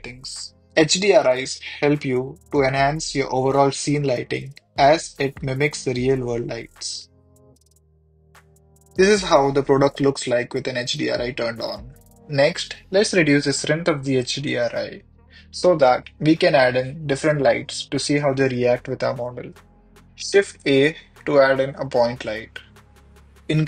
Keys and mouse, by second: 1.9 click, 3.7 click, 4.9 middle drag, 6.0 middle click, 7.2 h, 10.3 shift+middle click, 13.9 click, 14.5 click, 16.2 click, 16.6 click, 17.7 click, 17.9 click, 19.3 shift+middle drag, 19.9 ctrl+s, 20.3 shift+a, 21.8 g, 21.9 x.